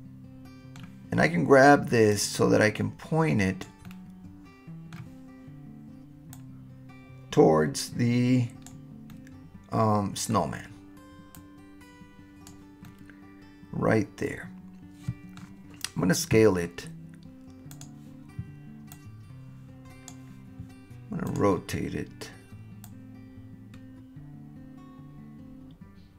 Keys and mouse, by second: 2.2-3.6 drag, 3.8-5.0 middle drag, 6.3-8.7 drag, 9.1-10.3 middle drag, 11.3-12.5 drag, 12.9-15.4 middle drag, 17.8 click, 19.0-20.1 drag, 21.4 click, 22.8-26.1 drag.